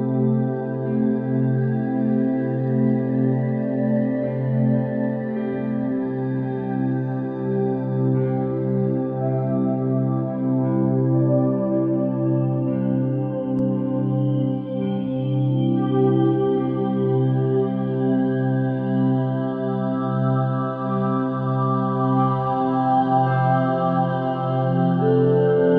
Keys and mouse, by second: 7.4 click, 9.3-12.6 drag, 12.9-14.7 middle drag, 16.3 ctrl+3, 18.7 KP_3, 19.3 KP_1, 19.8 Tab, 20.3 1, 20.7 alt+z, 22.0 click, 22.7 g, 25.1-25.7 drag.